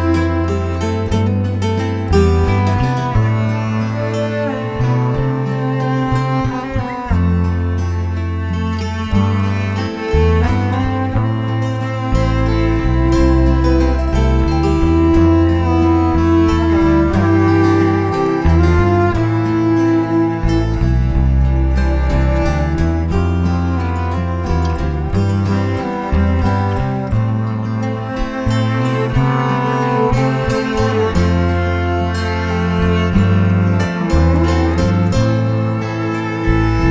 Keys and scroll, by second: 0.0-2.1 typing, 5.3 Escape, 5.4 Escape, 5.5 Escape, 5.6 h, 7.9 space, 12.4 Return, 13.1 Escape, 13.2-14.1 typing, 15.1 Escape, 15.1 Escape, 15.3-15.6 typing, 18.1 Escape, 18.1 space, 20.4 Escape, 20.4 space, 22.0 Escape, 23.5-24.4 typing, 26.1 Escape, 26.2 Escape, 27.3-28.2 typing, 29.5 Escape, 29.6 Escape, 30.1 Escape, 31.4 Escape, 32.3 t, 32.5 Escape, 32.5 space, 32.6 space, 36.7 Caps_Lock.